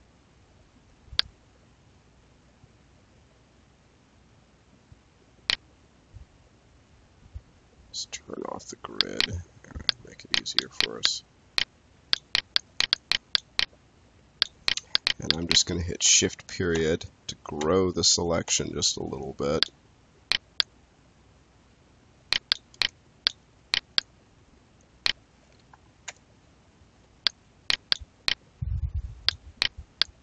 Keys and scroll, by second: 16.6 shift+., 25.9 shift+..